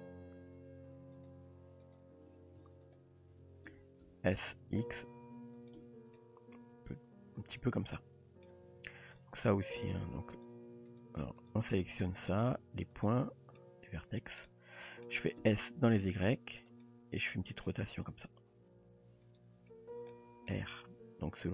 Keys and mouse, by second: 1.1 shift+click, 1.9 shift+drag, 2.8 shift+click, 3.7 s, 5.8 Tab, 6.2-8.4 middle drag, 8.7 Tab, 9.8 click, 10.4 shift+click, 10.9 click, 11.5 click, 12.0 shift+click, 13.0 shift+click, 13.6-14.4 middle drag, 14.5-15.1 middle drag, 15.4 s, 16.8-17.6 middle drag, 18.1 r, 20.1 middle click, 21.0 r.